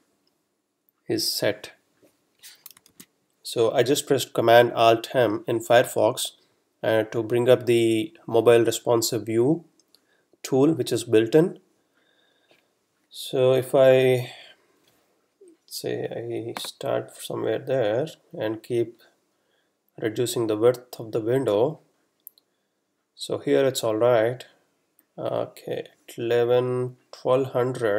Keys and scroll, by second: 3.0 alt+super+m.